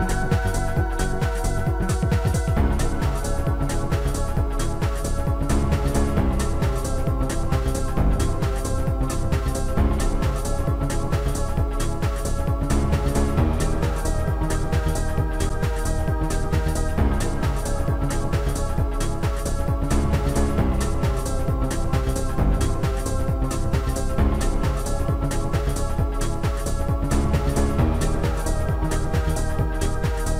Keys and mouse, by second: 0.4 click, 0.5 click, 1.6 Delete, 3.7 click, 5.6 Delete, 5.6 click, 6.5 Delete, 6.5 click, 7.7 click, 8.6 click, 12.2 click, 12.6 click, 14.3 click, 14.5 right click, 16.8 click, 19.2 click, 19.2 right click, 20.3 click, 20.3 right click, 23.2 click, 23.2 click, 24.0 shift+click, 25.7 shift+click, 28.4 shift+click, 28.6 right click.